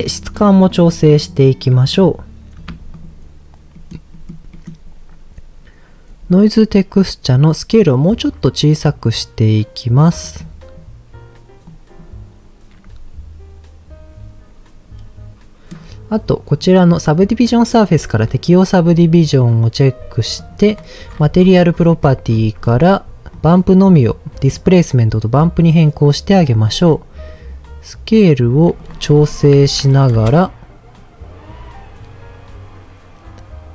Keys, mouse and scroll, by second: 3.7 middle click, 4.1 middle click, 4.5 middle click, 7.4-10.2 drag, 11.6 click, 14.8-15.8 middle drag, 16.5 click, 18.2 click, 20.3 click, 20.7-23.3 scroll down 13, 23.3-24.6 drag, 23.3 scroll down 1, 26.6-28.6 shift+drag, 28.8-30.2 drag.